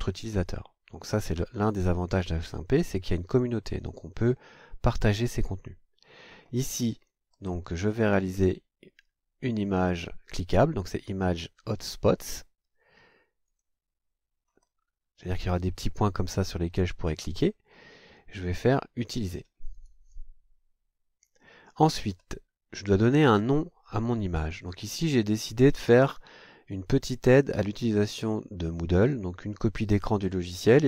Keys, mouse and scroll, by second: 7.3 scroll down 2, 13.4 click, 14.4-14.8 scroll down 2, 19.7 click, 22.1 scroll up 2, 25.3 click.